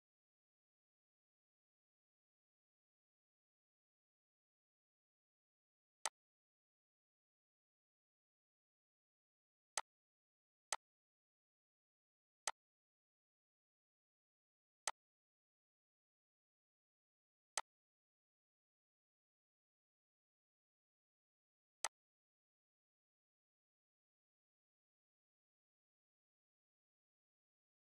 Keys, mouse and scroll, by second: 0.1 typing, 4.7 right click, 4.7 typing, 6.0 click, 9.8 click, 9.8 typing, 17.5-21.8 drag, 22.1-27.5 drag.